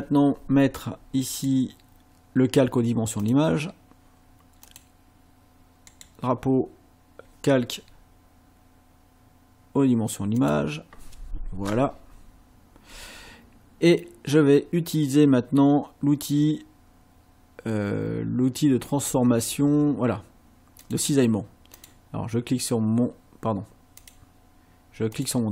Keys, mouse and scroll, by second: 1.3 right click, 3.2 click, 4.6 click, 5.9 right click, 10.4 click, 20.8 click, 21.8 click, 24.0 click, 25.2 click.